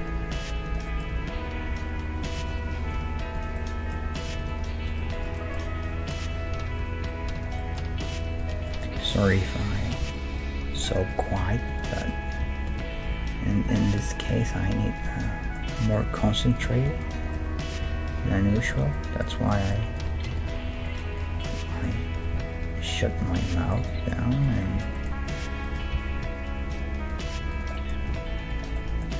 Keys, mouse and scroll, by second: 1.1 g, 2.9 right click, 5.2 right click, 5.7 g, 6.7 right click, 7.6 middle click, 8.1-10.2 right drag, 10.0 g, 10.2 middle click, 11.1-13.7 right drag, 11.4 g, 12.4 g, 13.1 g, 14.0-15.2 right drag, 14.3 g, 15.2-17.0 middle drag, 17.0 right click, 17.3-21.2 middle drag, 17.7-18.8 right drag, 17.8 g, 20.0-21.7 right drag, 21.4 middle click, 21.7-23.0 drag, 22.2 g, 23.0-26.7 middle drag, 24.4-29.1 right drag, 25.9 g, 27.7-29.1 middle drag, 28.0 g.